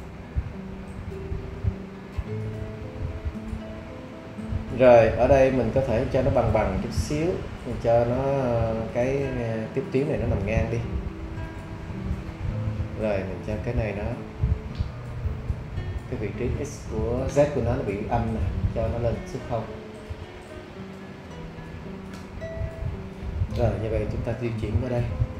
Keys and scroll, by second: 21.6 0, 22.1 Return.